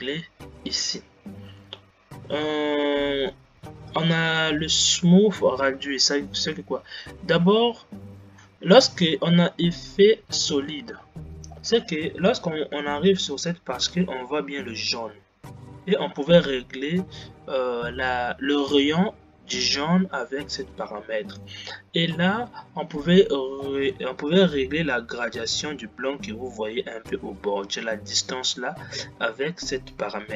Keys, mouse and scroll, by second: 11.9 scroll up 2, 13.1-16.1 scroll up 3, 24.1-27.3 scroll up 2.